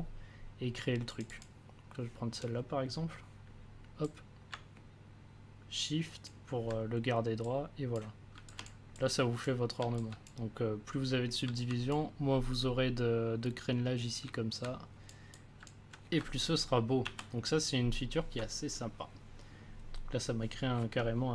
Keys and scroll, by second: 17.0 ctrl+z.